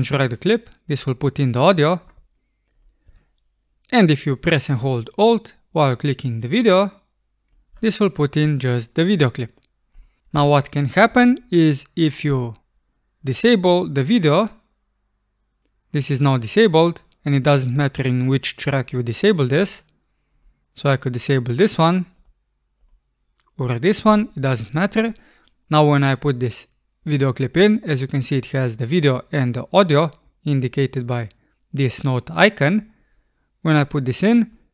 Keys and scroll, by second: 3.1 BackSpace, 10.4 BackSpace.